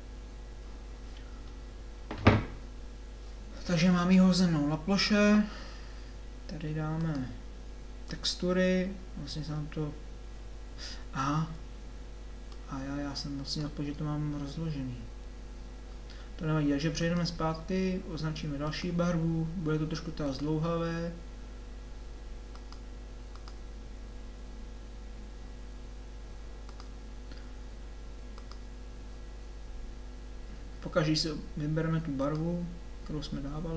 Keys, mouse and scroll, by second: 12.5-13.5 middle drag, 31.1-32.3 drag.